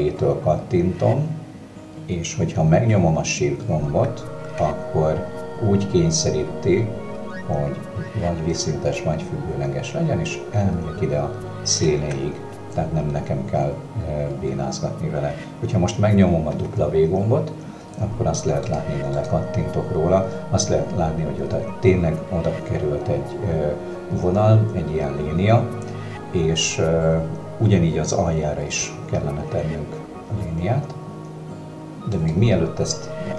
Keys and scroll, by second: 16.6 w, 28.9 w.